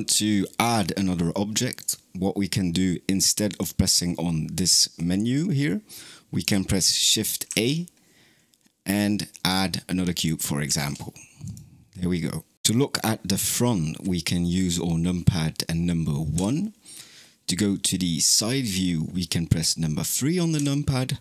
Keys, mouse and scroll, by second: 1.6 click, 3.3-6.3 drag, 7.3 shift+a, 16.2 KP_1, 20.4 KP_3.